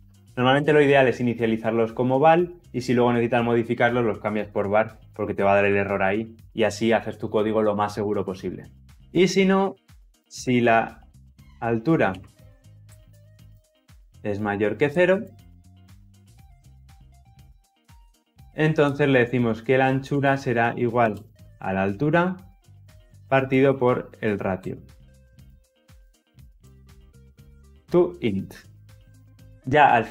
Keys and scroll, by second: 12.6 Return, 17.7 ctrl+alt+o, 19.6 Return, 28.3 ctrl+alt+l, 28.4 ctrl+alt+o.